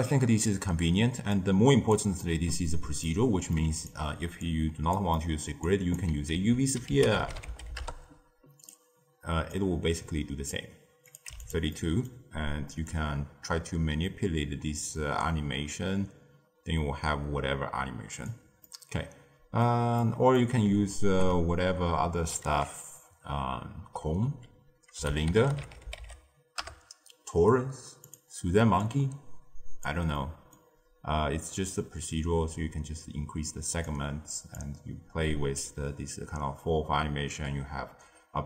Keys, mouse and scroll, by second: 0.9-1.4 scroll down 2, 1.4 click, 2.2-3.7 middle drag, 3.7 click, 4.4 click, 5.1-6.6 middle drag, 6.6 ctrl+a, 9.5 drag, 13.6-15.9 drag, 18.6-22.7 middle drag, 22.7 ctrl+a, 28.7 click, 30.2-32.1 middle drag, 32.1-37.6 drag.